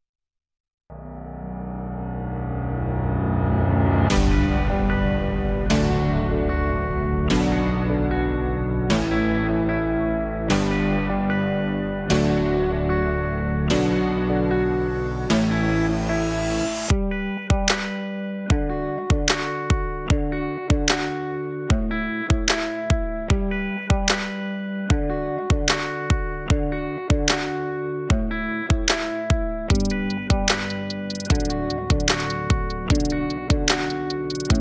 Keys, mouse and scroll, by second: 1.0 n, 2.6 click, 5.0 click, 5.2-7.4 drag, 7.4 t, 9.3 click, 10.1 click, 10.2-12.4 drag, 13.2 click, 13.3-16.0 drag, 19.5 click, 21.1-21.9 drag, 21.9-22.4 scroll up 2, 24.2-26.3 drag, 26.3-27.4 scroll up 1, 27.4 click.